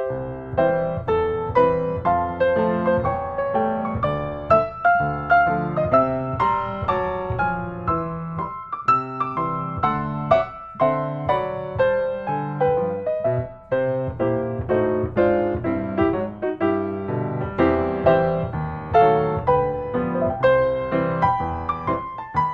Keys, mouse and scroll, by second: 0.5 click, 2.0 click, 3.3-3.7 scroll, 3.7 s, 4.7 click, 6.0 click, 7.1 click, 8.3 click, 9.8 typing, 10.3 Return, 11.6-12.0 scroll, 12.4-13.1 scroll, 16.8-17.9 drag, 20.4-21.5 drag, 21.5 right click, 22.4 click.